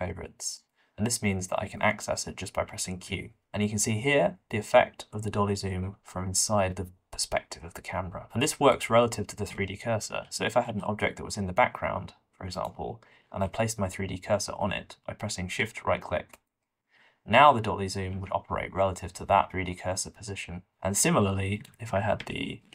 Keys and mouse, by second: 3.0 q, 8.7-10.0 middle drag, 10.2 shift+d, 13.3 alt+a, 18.1 q, 21.5 middle click, 22.2 shift+d.